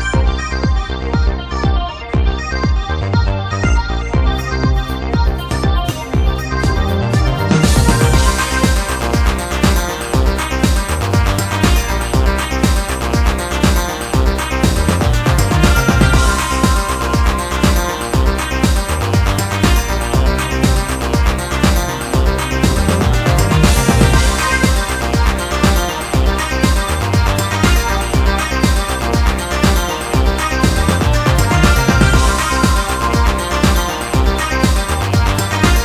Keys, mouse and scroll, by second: 1.6 middle click, 1.9-2.2 scroll up 1, 2.2 Tab, 2.6 middle click, 4.3 click, 4.9 right click, 5.3 shift+right click, 5.6 middle click, 6.6 shift+right click, 7.3 shift+right click, 7.5-9.1 middle drag, 9.1 z, 9.3 middle click, 10.4-11.1 typing, 10.9 right click, 12.6 right click, 13.7 click, 14.7-15.7 middle drag, 16.8 click, 17.1-19.6 middle drag, 21.8 alt+right click, 22.2 middle click, 22.7 alt+shift+right click, 23.0 middle click, 24.0 alt+shift+right click, 24.4 middle click, 24.8 alt+shift+right click, 25.2 middle click, 25.9 alt+shift+right click, 26.2 middle click, 26.9 alt+shift+right click, 27.2 middle click, 27.9 alt+shift+right click, 28.1 middle click, 28.8 alt+shift+right click, 29.1-32.3 middle drag, 32.3 z, 32.6 middle click, 33.7 ctrl+b.